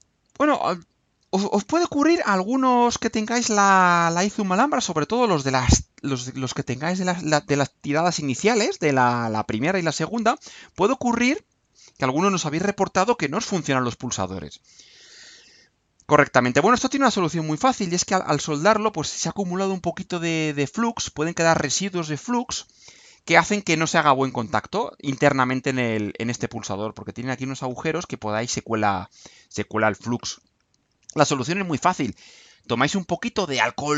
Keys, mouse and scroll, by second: 0.3-0.8 scroll up 2, 0.8 scroll up 1, 1.9 click, 3.3-3.7 scroll down 2, 3.7 middle click, 4.3 scroll down 2, 6.5 click.